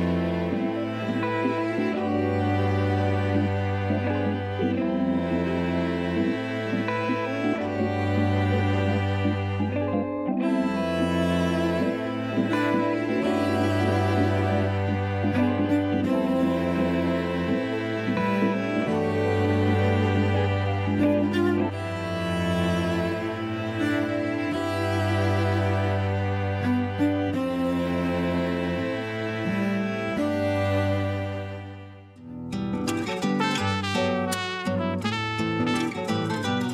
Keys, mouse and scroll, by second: 0.1 scroll down 2, 0.4 shift+middle click, 0.8 scroll up 4, 1.8 s, 5.3 ctrl+3, 5.9 middle click, 6.4 Tab, 6.8-8.6 middle drag, 8.6 ctrl+3, 10.0 right click, 11.3 KP_1, 11.8 Tab, 12.3-12.7 scroll up 1, 13.6 Tab, 14.5 click, 15.1 Tab, 15.7 a, 16.8 s, 20.1 a, 20.3 a, 20.7 ctrl+r, 24.4 a, 24.7 s, 26.2-26.8 scroll down 5, 26.8 shift+middle click, 27.3-28.0 scroll up 1, 28.0-29.5 shift+middle drag, 29.5 shift+d, 30.1 r, 31.9 g, 34.3 shift+middle click, 34.8-35.5 scroll up 1, 35.5 click, 36.3 3, 36.4 click.